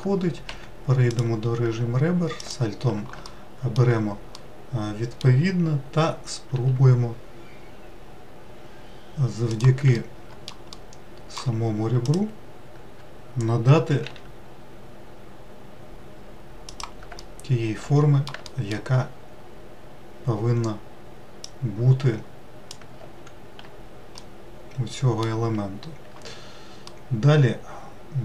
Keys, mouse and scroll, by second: 0.7 2, 1.3 click, 2.6 alt+click, 3.5 alt+middle click, 4.6-6.8 middle drag, 6.8 s, 10.2 alt+middle click, 11.0-12.3 middle drag, 12.3 alt+click, 14.3 s, 17.4 alt+middle click, 18.7 alt+middle click, 21.7 click, 24.5-28.2 middle drag.